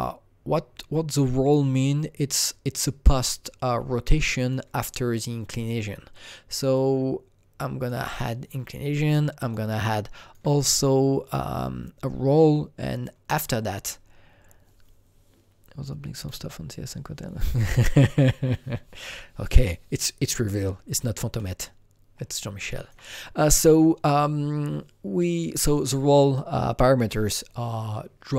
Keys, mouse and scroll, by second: 0.0-6.7 drag, 6.7-8.7 drag, 8.7-11.5 alt+drag, 11.2 scroll down 2, 13.4 scroll down 1, 20.9 alt+Num_Lock, 20.9-21.3 scroll down 1, 21.3-25.3 alt+middle drag, 22.3-25.3 alt+right drag.